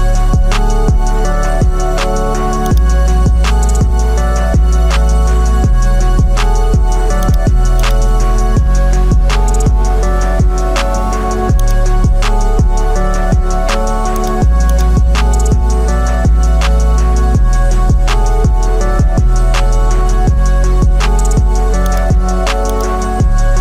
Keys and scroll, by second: 3.5 Left, 3.7 Left, 4.4 Left.